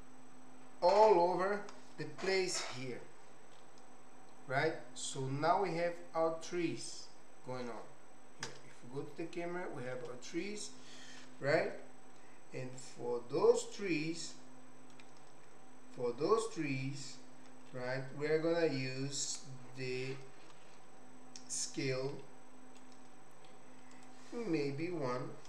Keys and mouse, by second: 3.7-7.7 middle drag, 8.4 KP_0, 9.9 KP_0, 22.1 middle click, 23.9-25.4 drag.